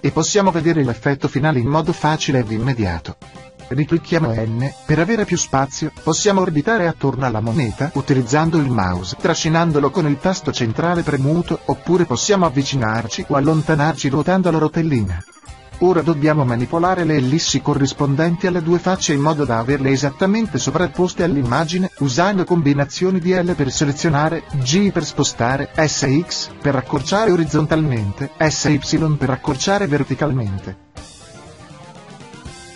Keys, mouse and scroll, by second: 13.6 l, 20.2 g, 25.9-28.5 drag, 27.8 s, 30.8-32.4 drag, 31.7 s, 32.5 click.